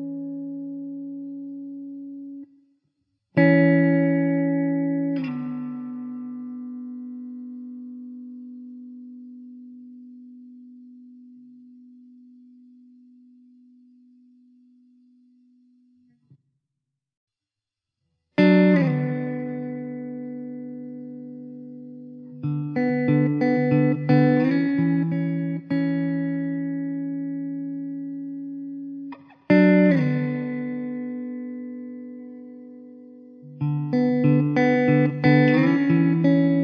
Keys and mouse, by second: 6.1 alt+w, 6.7 alt+middle click, 20.6 5, 22.0 alt+middle click, 22.4 alt+w, 23.0 middle click, 28.4 alt+w, 29.0 alt+middle click, 33.5 alt+w, 34.3 middle click, 36.4 2.